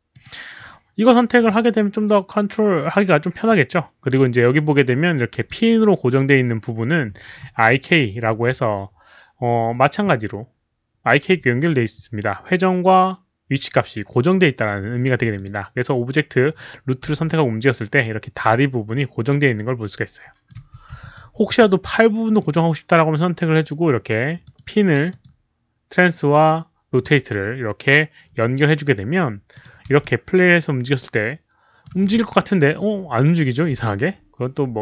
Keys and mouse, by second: 0.1 click, 0.1 alt+middle click, 0.2 alt+middle click, 4.0 click, 5.3 click, 5.3 alt+middle click, 6.3 click, 15.3 click, 16.4 click, 17.2-20.4 middle drag, 17.2 click, 17.2 w, 18.8 click, 18.8 w, 20.9-22.0 typing, 21.0 alt+click, 21.1 middle click, 22.3 alt+click, 24.1-25.7 typing, 24.4 alt+click, 24.4 middle click, 25.0 click, 25.2 middle click, 27.6-30.4 typing, 27.8 alt+click, 27.8 middle click, 29.5 alt+click, 30.0-31.8 middle drag, 32.1 z, 32.7-33.6 middle drag, 33.6 z.